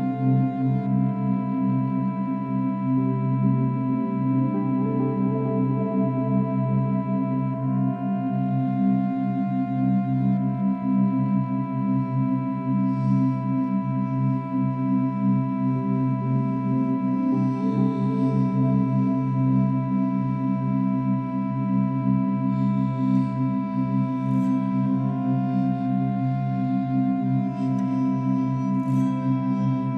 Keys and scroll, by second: 2.7 space, 9.2 ctrl+-, 9.4 ctrl+=, 10.2 ctrl+-, 10.9 ctrl+=, 13.3 ctrl+e, 14.3 ctrl+e, 15.6 ctrl+-, 15.9 ctrl+=, 17.1 ctrl+-, 17.9 ctrl+-, 18.1 ctrl+=.